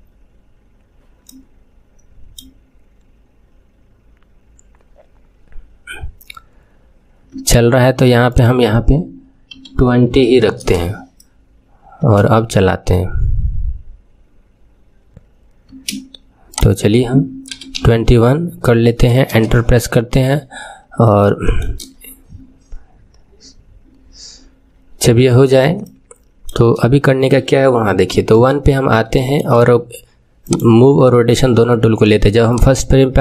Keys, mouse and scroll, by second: 1.2-4.2 middle drag, 7.3 space, 8.2-11.2 drag, 12.0 space, 15.6 space, 16.4-19.4 drag, 20.6-20.9 scroll up 1, 21.1 scroll up 1, 21.2-24.2 shift+middle drag, 24.6-25.8 scroll down 4, 25.8-28.0 shift+middle drag, 28.0 KP_1, 29.0-30.4 shift+middle drag, 30.4-33.2 drag.